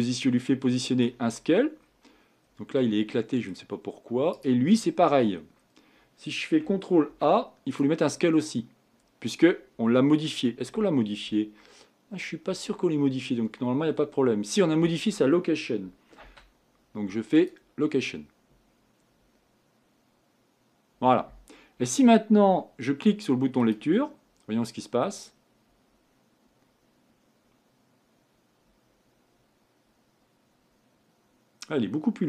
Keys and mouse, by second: 0.8 middle click, 1.3 middle click, 4.7-5.3 right drag, 5.3 middle click, 5.5 right click, 7.1 ctrl+a, 12.7 right click, 13.6 middle click, 16.2 ctrl+a, 23.6-26.8 drag.